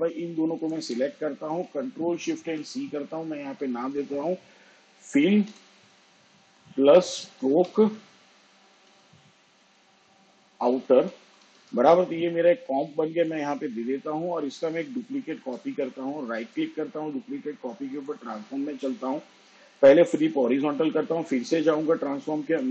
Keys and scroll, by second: 4.2 ctrl+shift+c, 5.4 f, 5.7 i, 6.3 l, 8.5-13.9 typing, 17.2 ctrl+d.